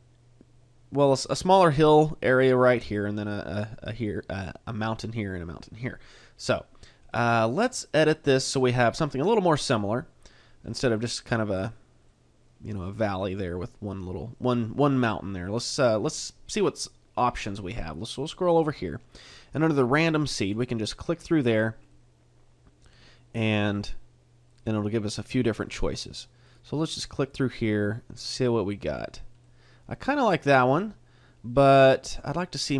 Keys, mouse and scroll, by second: 7.1 middle click, 8.6 middle click, 9.8 middle click, 11.0 middle click, 12.1 middle click, 13.3 middle click, 14.4 middle click, 16.6 middle click, 17.8 click, 20.6 click, 21.9 middle click, 23.8 click, 24.5 click, 25.6 click, 26.4 click, 27.2 click, 29.4 click, 29.4 middle click.